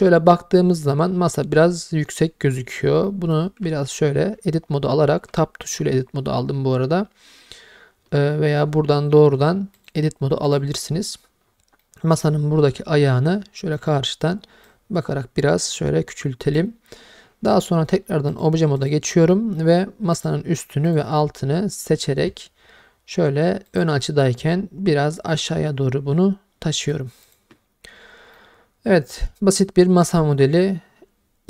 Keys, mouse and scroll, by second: 1.3-3.1 scroll up 1, 3.1 middle drag, 3.7 Tab, 5.3 Tab, 9.8 click, 11.8-13.8 middle drag, 14.7 click, 18.3 click, 19.3 middle drag, 20.1 click, 20.9 shift+click, 23.7 click, 25.2-27.4 drag, 28.4-31.4 middle drag.